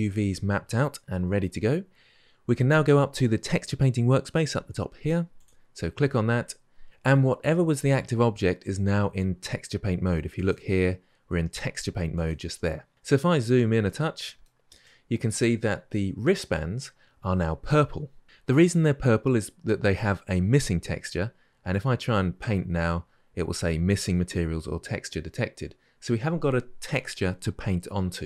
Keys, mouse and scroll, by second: 5.2-12.9 drag, 12.9-13.6 scroll up 6, 13.6-28.2 middle drag.